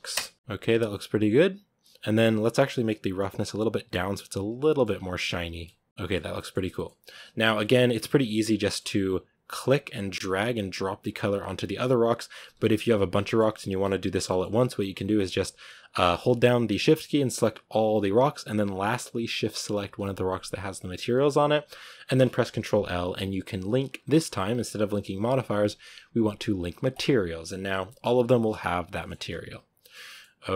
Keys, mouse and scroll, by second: 4.5 middle click, 4.7-5.5 scroll up 4, 5.5-6.1 middle drag, 6.1 scroll down 3, 6.2-6.9 middle drag, 6.9 z, 8.4 scroll down 2, 8.5-11.1 middle drag, 11.1 click, 12.4 z, 12.8 z, 13.1-13.5 shift+middle drag, 13.5 z, 14.1-15.4 middle drag, 15.4 right click, 16.7-26.9 shift+right drag, 28.2 middle click, 28.3 a, 28.8-29.5 middle drag, 29.5 z, 29.7-30.5 shift+middle drag.